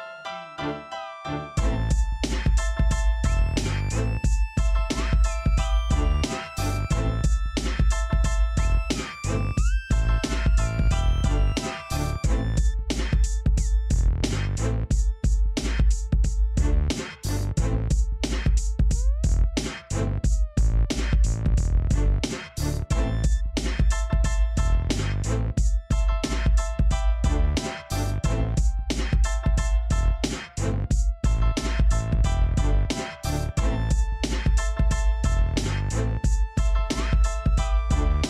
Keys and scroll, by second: 5.3 j, 11.7-13.5 typing, 19.9 j.